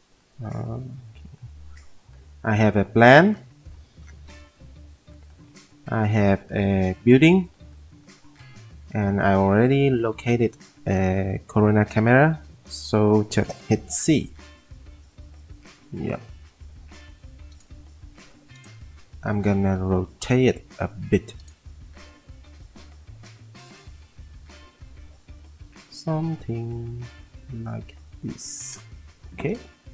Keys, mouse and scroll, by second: 0.8 F3, 0.8 p, 4.3 z, 14.4 c.